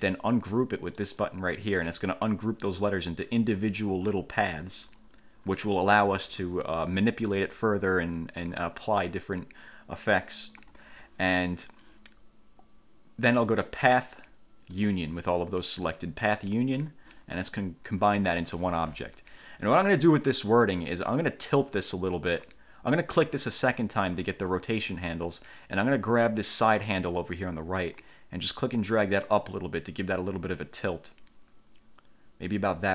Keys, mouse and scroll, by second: 1.2 click, 4.1 F2, 10.8 F1, 13.5 click, 14.9-17.1 drag, 23.6 click, 28.2-32.9 drag.